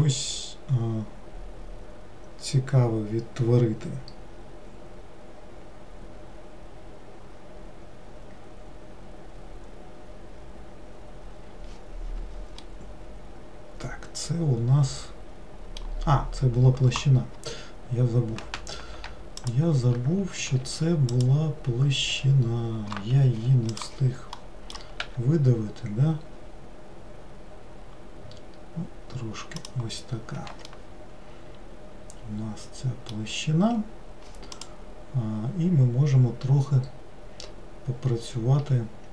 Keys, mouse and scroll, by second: 12.7-15.9 middle drag, 19.6 shift+click, 20.6 a, 21.4 click, 22.3 a, 24.5 middle click, 25.2 e, 30.8-39.1 middle drag.